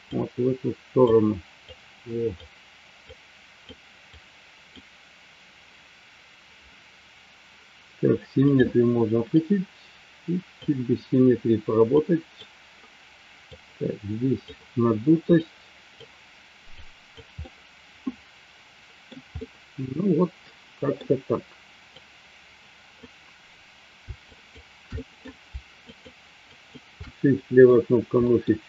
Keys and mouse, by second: 0.0 click, 1.6 click, 3.0 click, 4.3 click, 8.4 click, 9.4-10.7 drag, 11.9 click, 13.5 click, 15.3 click, 16.8 click, 17.4-19.0 middle drag, 19.3-20.9 middle drag, 21.9-23.9 drag, 24.3 shift+click, 24.9 middle click, 25.8 shift+click, 26.5 shift+click, 26.9 middle click, 28.2 middle click.